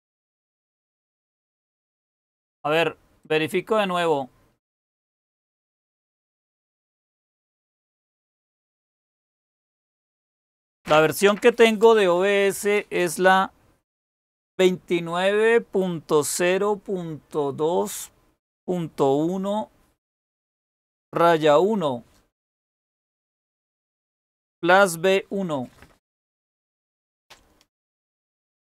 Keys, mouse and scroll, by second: 0.7-2.4 scroll down 1, 2.4-3.2 scroll down 1, 3.2-4.4 scroll down 1, 4.4-5.1 scroll down 1, 5.1-6.9 scroll down 1, 6.9-9.7 scroll down 1, 9.7-12.0 scroll down 1.